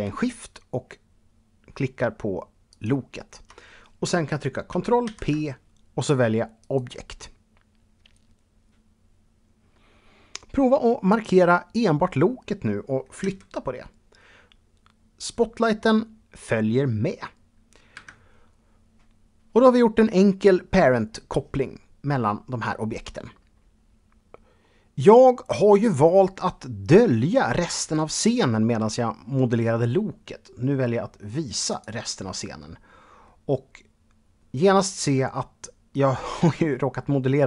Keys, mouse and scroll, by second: 2.5 shift+click, 4.9 ctrl+p, 6.4 click, 10.9 click, 13.1 g, 17.8 Escape, 31.7 click, 32.3-32.9 scroll down 2, 32.9-37.3 middle drag.